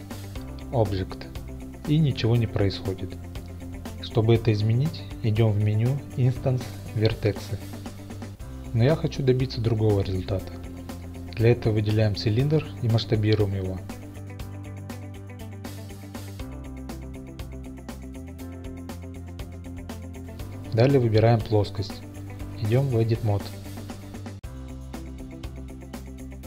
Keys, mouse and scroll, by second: 7.2 click, 8.2 click, 9.3-10.8 middle drag, 11.5 KP_7, 12.4-13.1 middle drag, 14.5 s, 15.5 right click, 15.8 click, 16.8 s, 21.4 click, 22.2 Tab, 23.7-24.8 shift+middle drag.